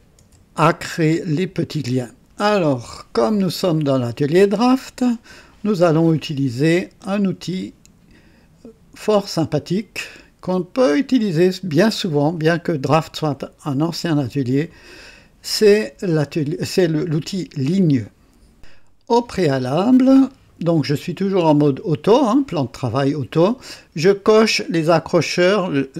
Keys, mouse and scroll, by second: 0.0-0.6 typing.